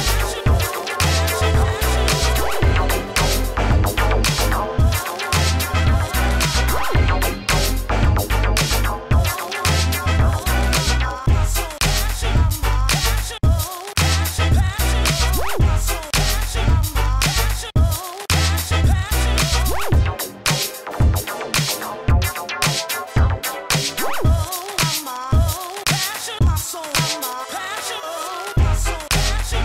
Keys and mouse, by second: 0.3 Tab, 1.1 ctrl+s, 13.9 KP_1, 15.3 ctrl+e, 15.8 Tab, 16.6 Tab, 17.4 Tab, 18.0 Tab, 18.8 a, 20.4 ctrl+e, 20.7 Tab, 23.0 Tab, 23.3-24.5 drag, 24.5 a, 24.6 Tab, 25.8 Tab, 26.6 ctrl+e, 28.0 ctrl+e, 28.3 Tab.